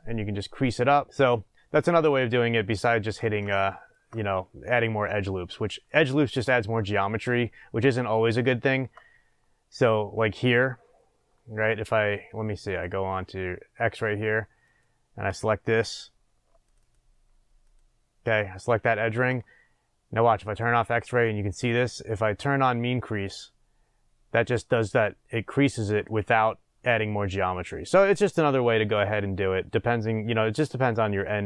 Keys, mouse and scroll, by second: 1.1-12.6 middle drag, 2.1-2.8 scroll down 2, 7.3-8.1 scroll up 2, 12.6 click, 13.4 scroll up 1, 14.6 click, 16.6 alt+click, 17.6 alt+click, 20.4 click, 22.9-30.9 drag, 27.7-29.9 scroll down 2, 29.9 scroll up 2, 30.9-31.4 shift+middle drag.